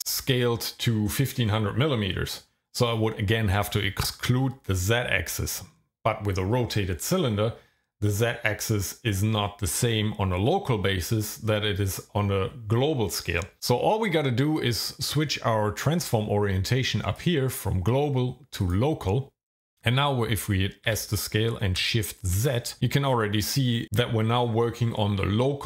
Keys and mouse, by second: 17.3-18.9 drag, 20.9 s, 22.3 shift+z.